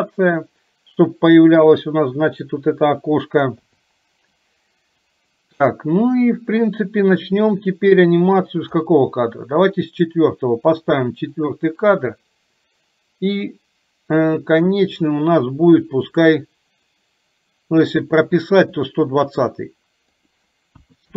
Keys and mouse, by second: 7.8-9.1 drag, 11.0 click, 11.3 click, 11.6 click, 15.1 click, 16.4 click, 19.0 click, 20.1-21.1 drag.